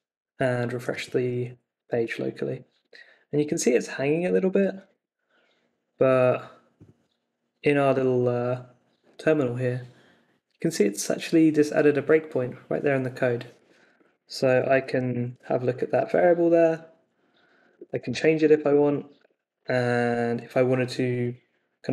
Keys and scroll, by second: 1.8 super+r, 4.1 super+Tab, 14.0-15.6 typing, 17.3 Up, 17.6-18.8 typing, 19.2 Return.